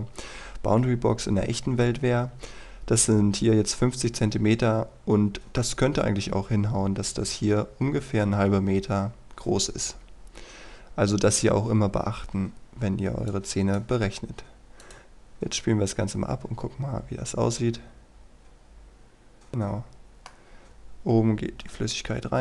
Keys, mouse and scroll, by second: 5.0-6.1 scroll up 1, 6.1-11.4 scroll down 1, 13.3 click, 19.5 middle click, 20.9-21.8 scroll up 1.